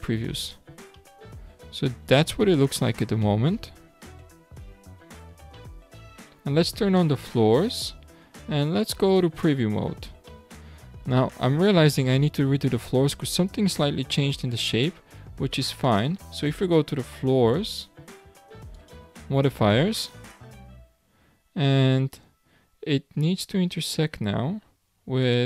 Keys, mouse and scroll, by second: 0.9-1.9 middle drag, 1.9-3.2 scroll down 10, 3.2-4.0 shift+middle drag, 4.0 scroll up 5, 4.7 scroll down 2, 5.5-7.2 shift+middle drag, 7.2 click, 8.8 click, 9.7-10.3 scroll down 3, 10.3-12.7 middle drag, 12.7 scroll down 1, 13.0-13.9 scroll up 6, 13.9-15.8 middle drag, 15.8 click, 18.7 click, 20.0 click, 25.2 click.